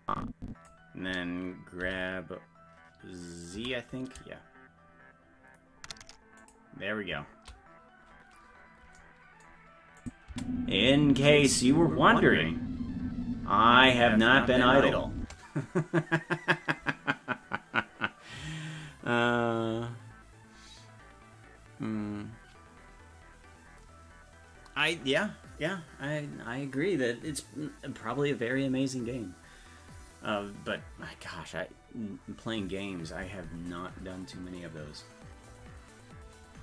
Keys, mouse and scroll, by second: 1.8 g, 10.0 click, 10.3 space.